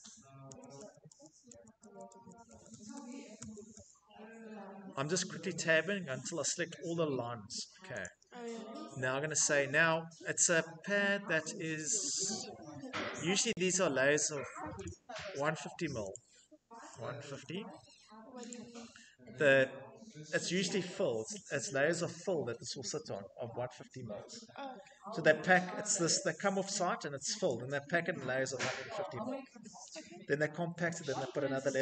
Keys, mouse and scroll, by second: 0.4 Tab, 0.7 Tab, 9.6 click, 12.3 click, 14.7 click, 16.0 click, 16.6-17.9 typing, 18.4 click, 21.2 right click.